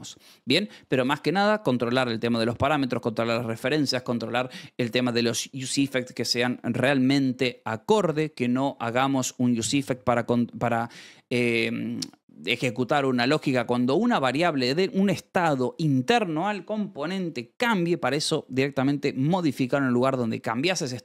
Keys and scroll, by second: 0.2 Escape.